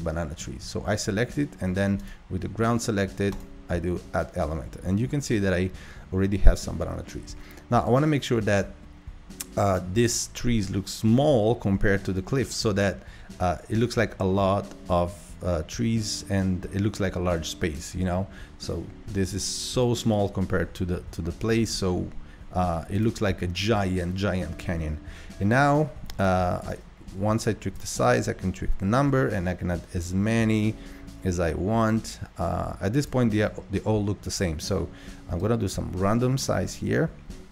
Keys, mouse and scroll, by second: 2.0 click, 3.3-11.0 drag, 14.0-17.1 drag, 26.2-32.0 drag, 35.4-37.5 drag.